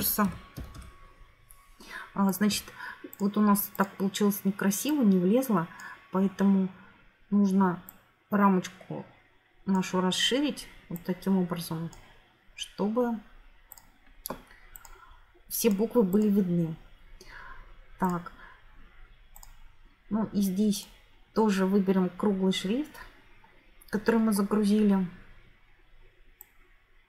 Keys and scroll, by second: 0.0-1.2 typing.